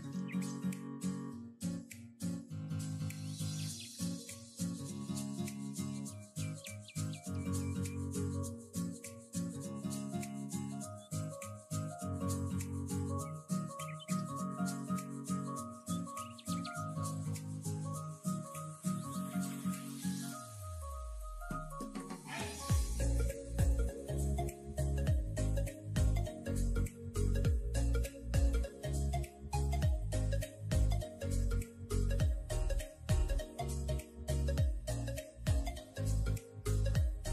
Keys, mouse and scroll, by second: 0.6 s, 2.2 e, 3.1 s, 4.6 e, 7.3 e, 9.3 s, 10.6-11.2 middle drag, 11.2-11.6 scroll down 1, 11.6-13.2 shift+middle drag, 13.5 s, 21.0-21.3 scroll down 3, 21.3-21.9 middle drag, 21.9-22.7 scroll up 3, 22.1 middle click, 22.7 r, 24.7 o, 25.3 s, 34.4 s, 36.2 r.